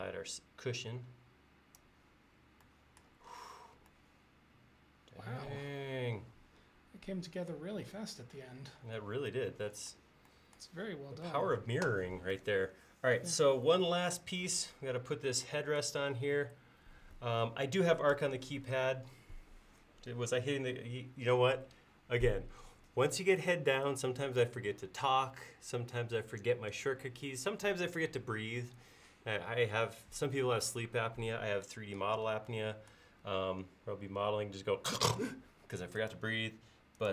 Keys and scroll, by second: 33.3 l.